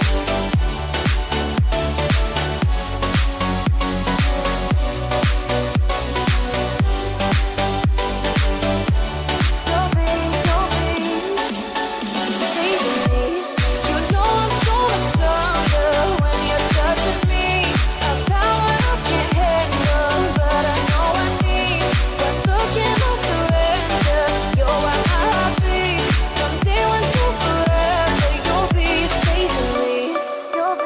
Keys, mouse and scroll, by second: 2.3 click, 3.0-3.3 typing, 3.9 click, 5.7-6.6 typing, 7.0 click, 7.8-10.3 drag, 10.3 scroll down 1, 10.7-12.0 middle drag, 12.0 click, 13.3-13.7 typing, 14.6-17.0 drag, 19.1 click, 23.2 typing, 24.2 click, 26.2 scroll up 1, 27.8-30.8 drag.